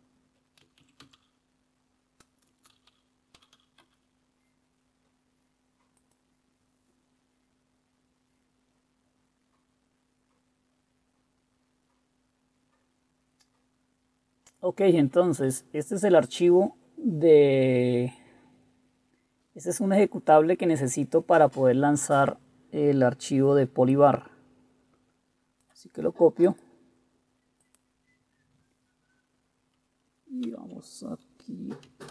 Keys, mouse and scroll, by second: 0.5-4.1 typing, 30.6 super+4.